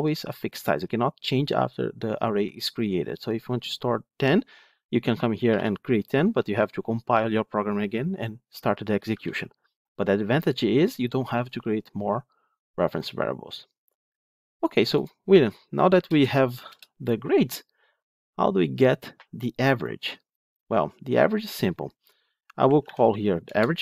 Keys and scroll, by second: 9.1 ctrl+z, 23.4 Return.